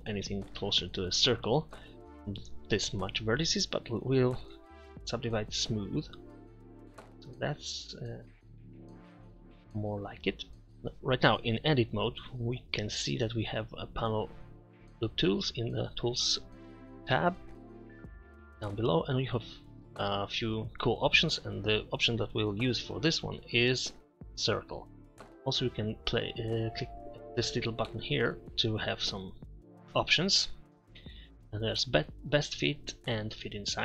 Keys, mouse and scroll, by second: 2.8 a, 3.2 a, 4.6 w, 17.6-18.9 middle drag, 28.2-29.7 middle drag.